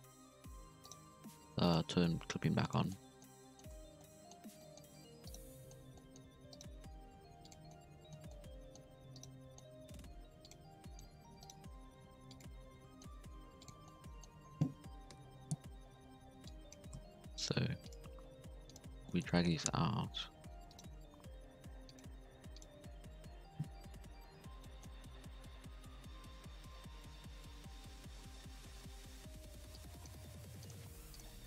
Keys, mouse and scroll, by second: 1.6 click, 2.1 g, 2.8 middle click, 3.2-3.6 scroll down 1, 3.6 scroll up 1, 3.7 Tab, 3.8 scroll down 1, 4.0-4.5 middle drag, 4.5 scroll down 1, 4.6 middle drag, 4.8 Tab, 4.9-5.2 scroll up 1, 5.2 right click, 5.5-6.5 middle drag, 6.5 right click, 6.8 g, 7.7 middle click, 8.1 scroll down 1, 8.3 middle click, 8.8-9.1 scroll up 1, 9.1 right click, 9.3 scroll down 1, 9.4 middle click, 9.7 scroll up 2, 9.9 g, 10.6 middle click, 11.4 right click, 11.6 g, 12.7 scroll down 2, 12.8 middle click, 13.2 g, 13.8 middle click, 14.2-15.1 scroll down 1, 15.1 KP_1, 15.6-16.4 scroll up 5, 16.4 click, 16.9 z, 17.4 g, 18.0 z, 18.3 g, 19.0 shift+middle click, 19.6-20.0 scroll down 1, 20.0-20.6 scroll up 2, 20.6 2, 20.6 right click, 20.8 g, 22.1 g, 22.7-23.2 scroll down 4, 23.2-23.9 scroll up 2, 23.9 KP_3, 24.6 shift+middle click, 24.9 z, 25.3 z, 25.9 KP_1, 27.3 KP_3, 27.6 KP_1, 27.8 KP_3, 29.0 1, 29.2 z, 29.7 click, 30.3-31.4 typing.